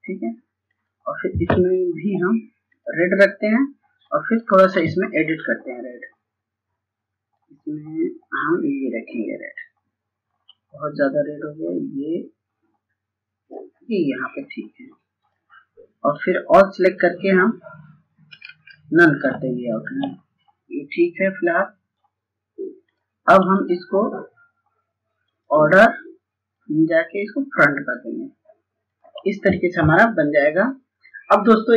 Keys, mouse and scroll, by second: 17.7 right click, 19.0-27.5 drag.